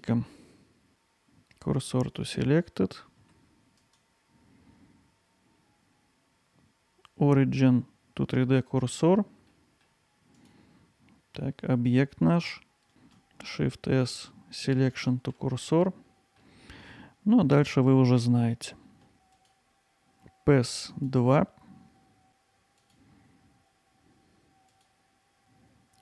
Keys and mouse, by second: 3.9-9.0 right drag, 9.5-9.8 middle drag, 12.9 shift+s, 15.6-16.4 alt+middle drag, 19.3-21.1 drag, 22.8-24.9 drag.